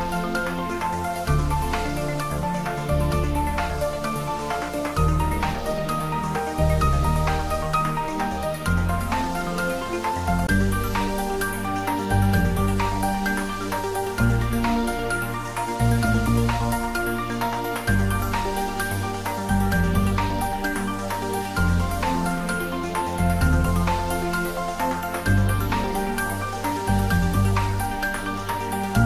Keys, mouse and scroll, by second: 1.1 shift+z, 2.3-3.4 typing, 9.9 click, 12.3 3, 14.3 g, 14.8 z, 20.0 click, 20.5 scroll down 1, 21.3-24.1 middle drag, 24.3 shift+z, 26.1 scroll down 1, 26.6 middle click, 27.8 click.